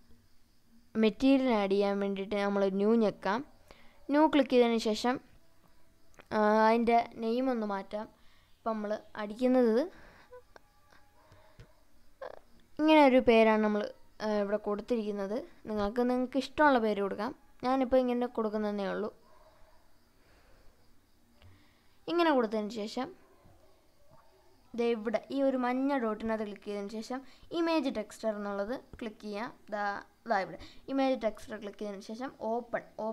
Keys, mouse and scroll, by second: 0.1 click, 4.7-20.7 drag, 25.6-30.7 drag, 25.6-26.4 scroll down 1.